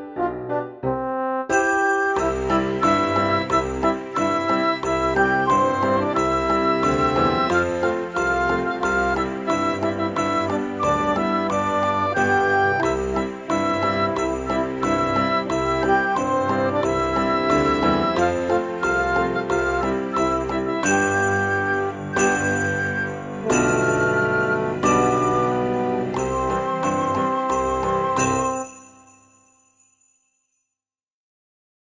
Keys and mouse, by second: 0.8 a, 1.9 s, 2.3 y, 4.4 click, 4.8 e, 6.1 z, 8.8 click, 9.9 middle click, 11.5 a, 11.8 middle click, 12.3 g, 12.5 z, 14.7 click, 15.2 middle click, 16.0 Tab, 17.3 click, 20.2 click, 22.5 Tab, 24.3 click, 25.0 middle click, 25.6 shift+middle click, 26.1 click, 27.4 middle click, 28.2 shift+click, 30.1 c, 30.4 middle click, 30.7 right click, 31.5 shift+d.